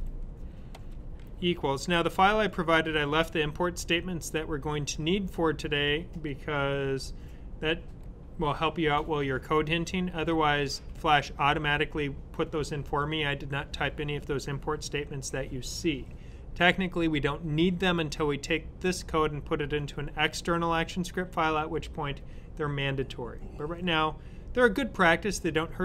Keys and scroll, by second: 0.0-0.6 typing.